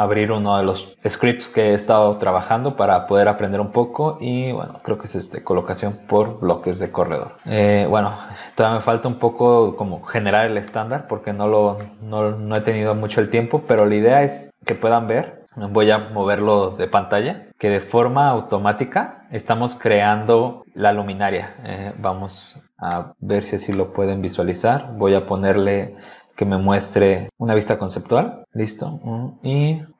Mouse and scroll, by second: 4.8 click, 7.3-8.2 scroll down 1, 10.5 scroll down 2, 10.6 middle click, 11.7 scroll down 2, 11.8 middle click, 12.5 middle click, 13.2-13.6 scroll up 2, 13.8 middle click, 14.5-15.4 scroll up 2, 15.4 click, 16.6 click, 19.1-19.7 scroll up 4, 22.9 middle click, 23.7 middle click, 24.9 click, 26.2 click, 29.1 click.